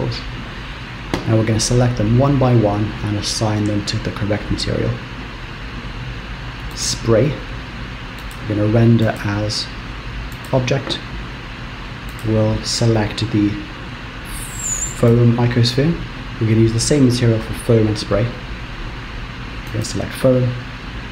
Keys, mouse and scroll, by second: 7.4 click, 8.4 click, 9.1 click, 12.2 click, 20.4 click.